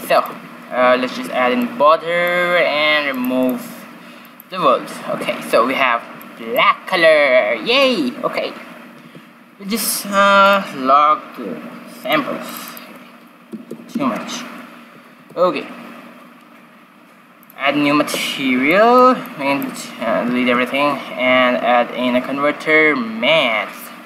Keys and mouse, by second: 0.8 ctrl+b, 3.0-6.0 drag, 5.3 shift+z, 6.1-8.2 middle drag, 9.1 shift+z, 10.3-14.5 drag, 15.5 shift+z, 17.4-18.9 drag, 18.9-20.0 middle drag, 19.7 x, 20.3 shift+a.